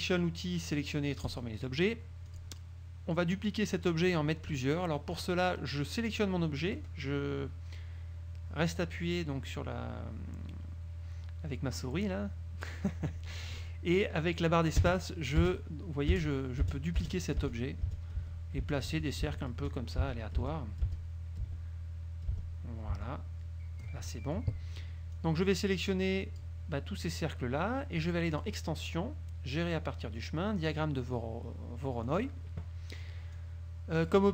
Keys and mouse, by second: 1.4 click, 2.4 click, 5.3-24.7 drag, 14.9 space, 16.3 space, 22.5 space, 25.3-26.7 drag, 28.5 click, 32.2 click, 33.5 click.